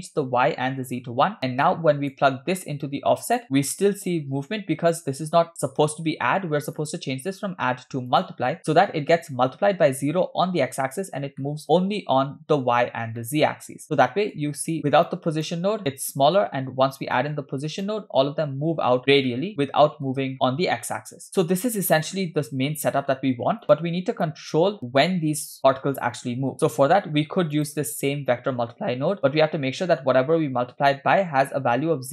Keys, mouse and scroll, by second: 1.7 click, 2.8-3.4 drag, 5.0 drag, 6.8-8.4 drag, 11.5-11.8 middle drag, 13.2-14.5 middle drag, 14.8 click, 15.1 ctrl+right click, 17.2-18.0 drag, 19.3 middle click, 21.3-22.0 scroll down 4, 22.1-23.0 drag, 23.6-24.3 drag, 24.6 scroll up 2, 26.5 scroll up 4, 26.5 click, 27.6 click, 29.3 middle click, 30.0 scroll up 1.